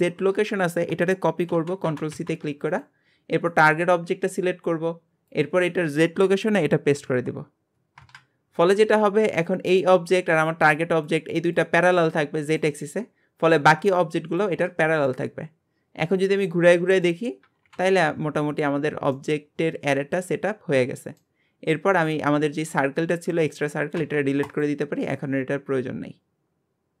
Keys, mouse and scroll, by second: 2.1 ctrl+c, 3.5 click, 5.3-8.4 drag, 15.0-17.6 middle drag, 17.6 KP_7, 18.7-19.1 scroll down 2, 19.1-21.9 middle drag, 21.9 click, 25.1-27.0 middle drag.